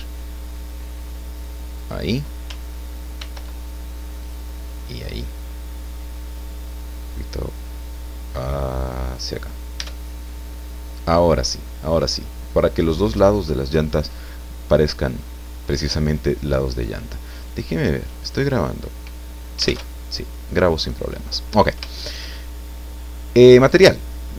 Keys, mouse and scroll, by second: 1.8 click, 3.2 ctrl+r, 4.2 click, 9.1 click, 9.8 Tab, 10.3 click, 11.3 scroll down 1, 11.6-13.0 drag, 13.2 scroll down 1, 13.8-15.4 drag, 15.4 middle click, 15.5-15.8 scroll up 1, 15.8 middle click, 17.4 click, 18.2 click, 20.0 alt+Tab, 20.7 scroll down 2, 21.1 click, 22.7 click, 23.6 right click.